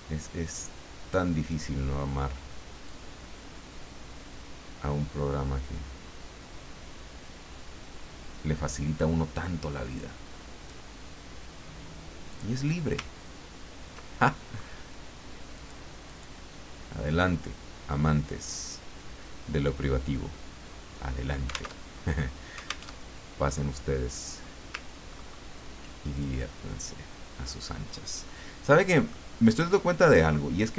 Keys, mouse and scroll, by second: 2.9-10.9 drag, 12.3 click, 13.3-13.6 ctrl+scroll down 2, 14.2 ctrl+middle click, 15.5 click, 16.1 click, 18.4 click, 21.8 alt+Tab, 22.9 alt+Tab, 24.1 click, 25.1-25.6 ctrl+scroll up 2, 26.1 ctrl+click, 29.1-30.3 middle drag.